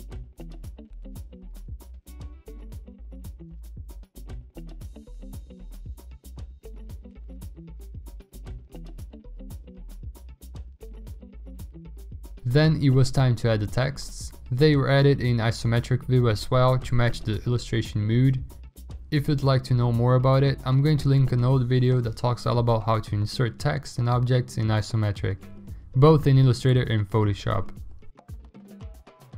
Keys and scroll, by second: 0.6 ctrl+d, 1.0 ctrl+alt+g, 11.4 v, 14.9 ctrl+g, 15.1-16.2 typing, 17.4-18.4 typing, 18.6 ctrl+Return, 18.9 ctrl+t, 20.1 Return, 20.3-20.7 typing, 21.9 ctrl+t, 23.3-26.2 typing, 27.5-29.3 typing.